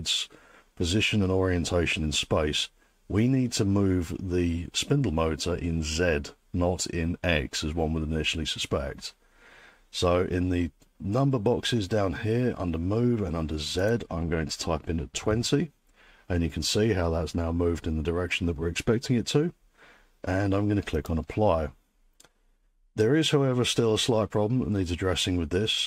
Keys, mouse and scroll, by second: 14.2 click, 14.9-15.8 typing, 21.0 click.